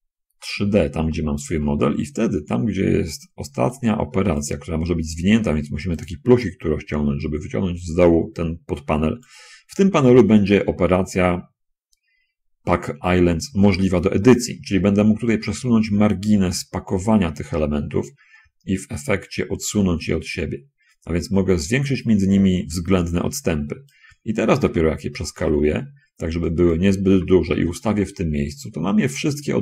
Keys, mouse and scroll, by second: 1.3-2.4 drag, 4.0 click, 6.0 click, 8.1-9.6 drag, 15.6-24.1 drag, 24.8 s, 27.2 g.